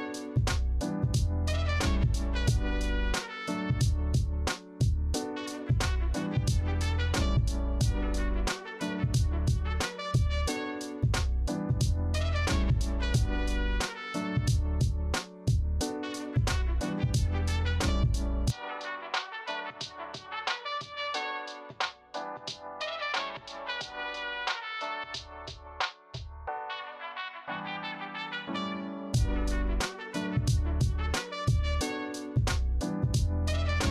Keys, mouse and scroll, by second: 8.3 alt+Tab, 19.0 ctrl+c, 19.3 ctrl+f, 29.6 ctrl+c, 29.9 ctrl+f, 33.3 alt+Tab.